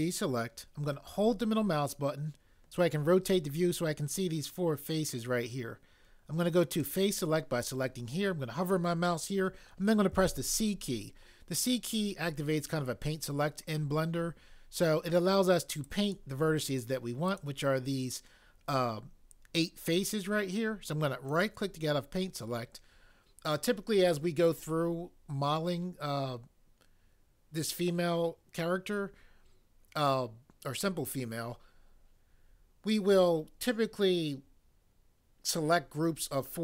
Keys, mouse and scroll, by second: 6.7 click, 10.2 c.